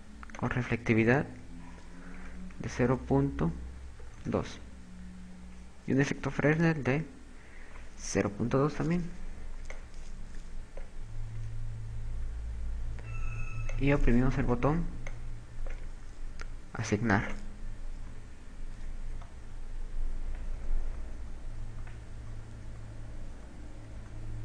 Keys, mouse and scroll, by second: 6.7 click, 7.5 click, 10.0 click, 11.8 Tab, 12.6 Tab, 15.2 click, 17.8 click, 18.6 Tab, 19.6 z, 20.7-24.4 typing.